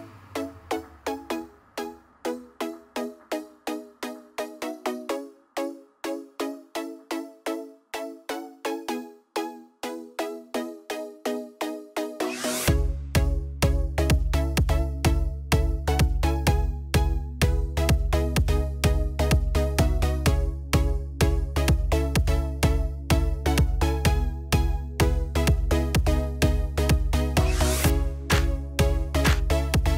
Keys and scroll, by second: 5.6 ctrl+a.